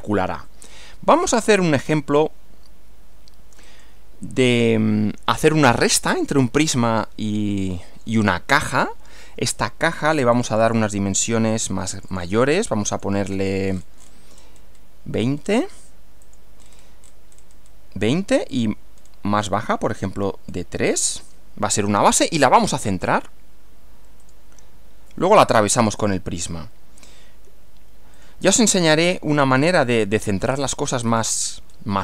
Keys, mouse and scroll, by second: 1.2-2.4 middle drag, 3.6 click, 7.0-8.2 middle drag, 9.6 click, 10.4 click, 12.0 click, 12.9 click, 13.3 scroll down 2, 13.7-14.2 scroll up 2, 14.4-14.8 scroll up 2, 14.8 scroll down 2, 15.4 scroll up 1, 16.2 click, 16.6-17.0 scroll up 2, 17.4-17.8 scroll up 2, 18.6 click, 19.0-20.1 scroll down 6, 20.5 scroll down 2, 22.4 click, 24.2 click, 26.0 click, 28.2 click, 28.6-29.1 scroll down 2, 29.4-29.8 scroll down 2, 31.1 click, 31.6 scroll up 1.